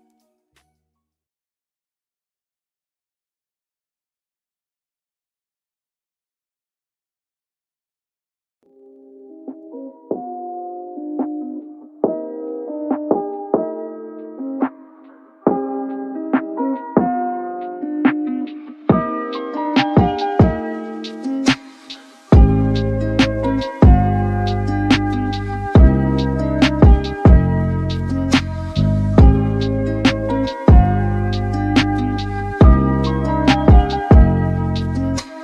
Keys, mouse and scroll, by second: 16.7-22.9 drag, 24.5-26.3 middle drag, 28.8-30.3 scroll up 10.